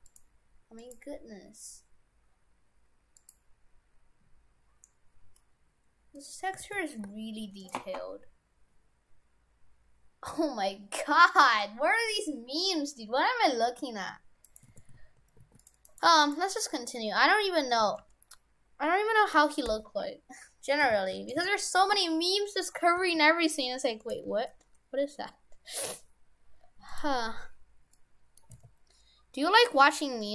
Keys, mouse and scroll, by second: 6.2 middle click, 6.6 shift+f, 14.5 right click, 14.8 shift+f, 15.9 right click, 16.1 Tab, 16.2 right click, 17.1 middle click, 17.8 a, 18.0 g, 19.7 r, 22.2-22.7 scroll down 3, 23.0 g, 24.2 g, 27.2 scroll up 4, 28.0 middle click, 28.6 s.